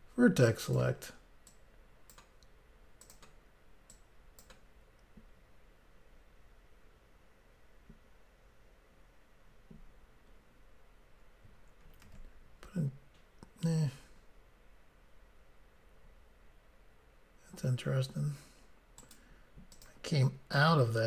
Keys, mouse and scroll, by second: 0.7 click, 0.7 click, 1.5 click, 3.0 click, 3.1 click, 3.9 click, 12.1 ctrl+r, 12.5-13.3 scroll up 1, 14.1-15.1 scroll down 1, 19.0 right click, 19.8 click, 20.6 click.